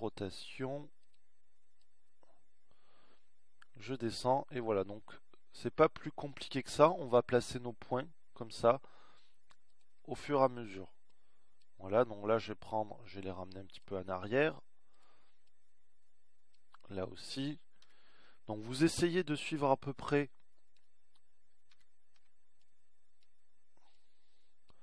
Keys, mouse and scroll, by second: 0.5 r, 3.3-5.2 drag, 12.8-13.8 drag, 15.9 click, 17.2-18.4 drag, 19.5 a, 20.0 b, 21.9-23.3 drag, 23.5 a, 24.0 b.